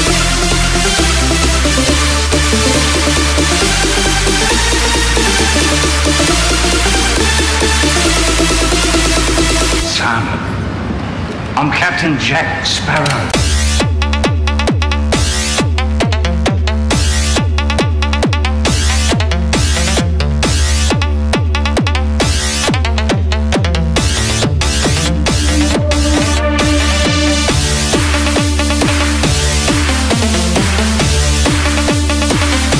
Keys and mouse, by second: 4.2 KP_1, 6.8 KP_0, 16.2 shift+f.